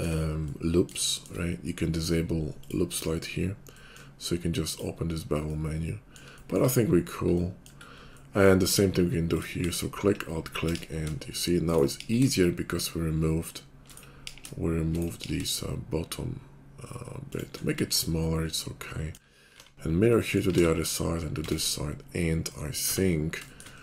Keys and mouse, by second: 0.1 middle click, 1.0 shift+click, 1.3-2.5 middle drag, 2.6 click, 3.4-4.7 middle drag, 4.7-9.4 drag, 9.4 alt+middle click, 9.8 alt+click, 9.9-11.1 middle drag, 10.8 ctrl+b, 10.8 ctrl+click, 11.1 shift+click, 11.8 middle click, 12.1 ctrl+b, 12.1 ctrl+click, 12.3 middle click, 14.2 ctrl+b, 15.2 ctrl+b, 19.5 alt+x, 21.1 alt+x, 22.9 Tab.